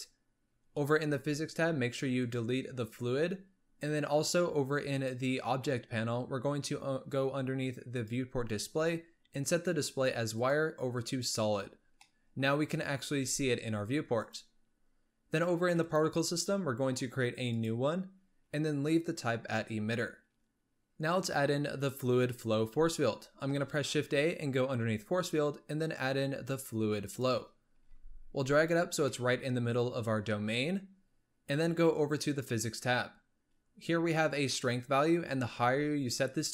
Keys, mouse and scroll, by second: 0.6-2.1 scroll up 8, 2.1-5.0 drag, 7.8-8.6 drag, 8.6 scroll down 4, 10.3-12.0 drag, 12.0-13.1 middle drag, 13.1 g, 15.7 click, 17.5-20.5 drag, 23.4 shift+a, 27.7 g, 28.9 scroll down 2, 29.0-30.3 middle drag, 30.3-32.2 scroll up 3, 32.2 click.